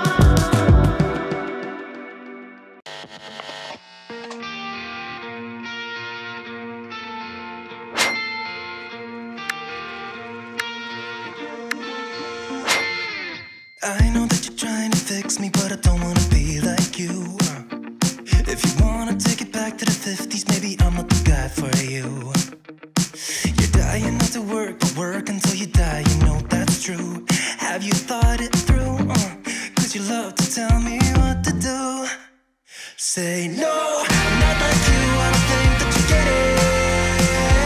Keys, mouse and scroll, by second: 0.0 click, 2.3 click, 4.7-5.3 scroll up 1, 6.0 click, 6.7-7.1 scroll up 1, 8.4 click, 10.0 alt+click, 11.6 click, 14.5 alt+scroll up 1, 15.4-19.1 drag, 24.6-25.3 scroll down 1, 26.4-27.0 drag, 27.3 scroll up 1.